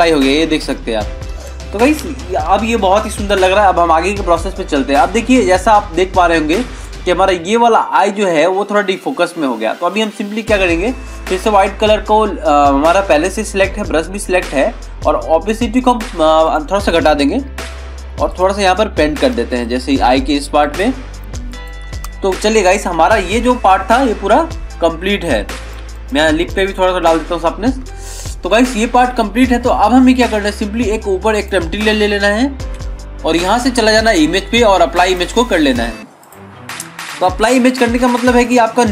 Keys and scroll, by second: 2.0 ctrl+-, 2.3 ctrl+0, 2.8 ctrl+-, 3.7 ctrl+=, 22.6 ctrl+-, 23.6 ctrl+=, 27.9 ctrl+-.